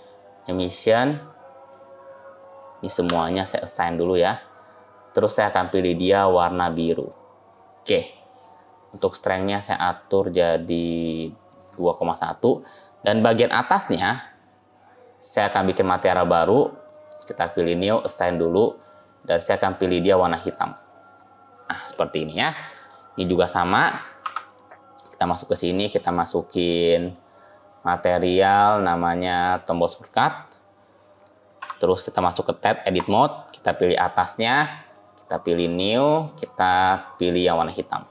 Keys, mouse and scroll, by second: 2.9 a, 3.9 click, 4.0 click, 5.0 click, 9.5 click, 12.0 click, 13.5 click, 15.8 click, 18.1 click, 19.6 click, 22.7 click, 24.1 Tab, 24.4 click, 25.7 click, 30.1 click, 31.0 click, 31.5 Tab, 32.8 click, 34.8 click, 36.7 click.